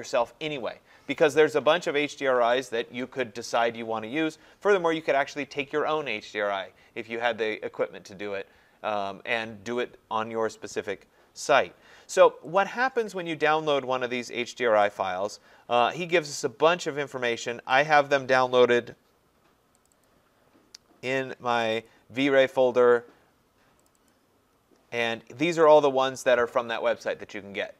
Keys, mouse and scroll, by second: 3.2 click, 12.6 click, 15.0 click, 17.8 click, 18.0 click, 19.9 click, 20.1 click, 21.7 click, 21.9 click, 23.9 click, 24.1 click.